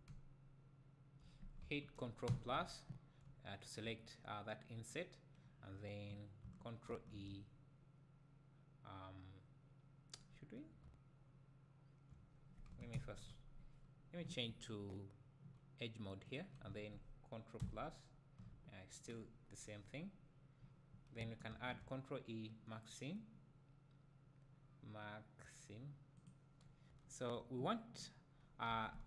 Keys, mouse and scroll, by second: 0.1 `, 2.3 ctrl+KP_Add, 3.8-4.4 middle drag, 12.9 ctrl+KP_Subtract, 16.3-17.6 drag, 17.6 ctrl+KP_Add, 28.7 a.